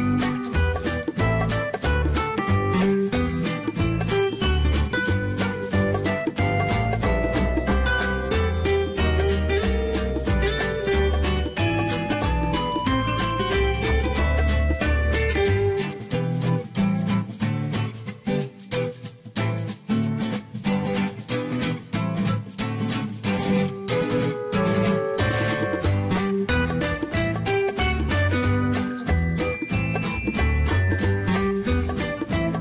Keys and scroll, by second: 2.6 0, 3.3 ., 5.3 5, 5.6 Return, 9.6 Escape, 13.3 Escape, 16.8 Delete, 21.3 Delete, 25.9 1, 26.4 Return, 31.0 0, 31.5 ., 31.9 5, 32.0 Return.